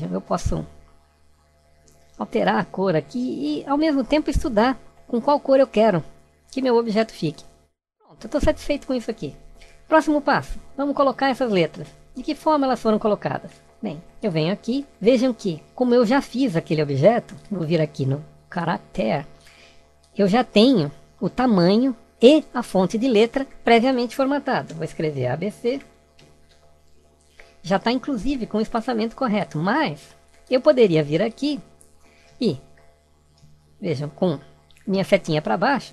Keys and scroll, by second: 34.9 Down.